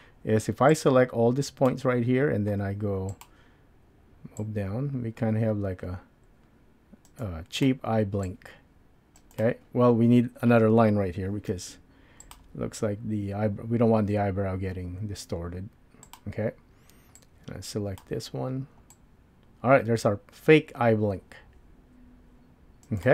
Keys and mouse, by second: 1.6 click, 1.6 1, 3.2 click, 4.6-11.7 drag, 11.7 ctrl+r, 17.4 click, 18.9-23.1 drag.